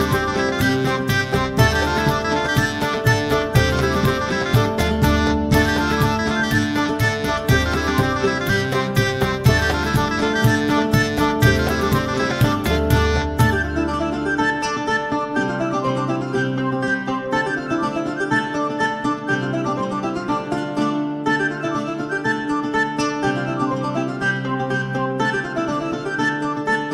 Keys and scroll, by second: 24.1-25.5 typing, 25.5 Return.